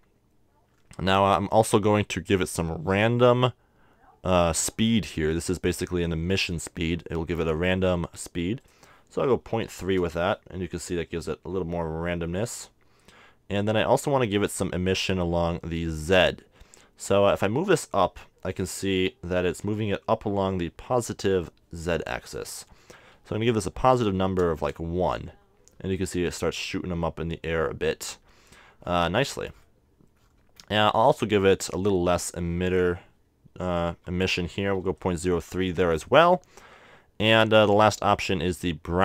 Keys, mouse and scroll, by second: 0.8-3.1 middle drag, 8.6-10.3 drag, 17.1-18.8 drag, 23.9-25.6 drag, 29.0-30.1 middle drag, 30.3-32.6 middle drag, 31.6-33.4 drag.